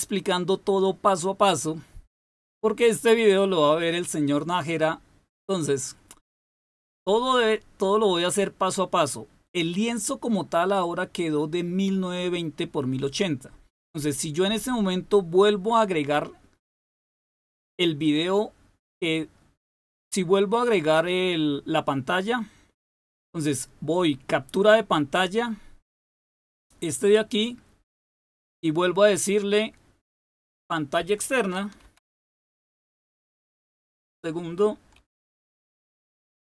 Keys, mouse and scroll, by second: 17.2 click, 27.1 click, 27.6 click, 30.0-31.8 drag, 31.5-33.0 typing, 34.6-36.4 typing.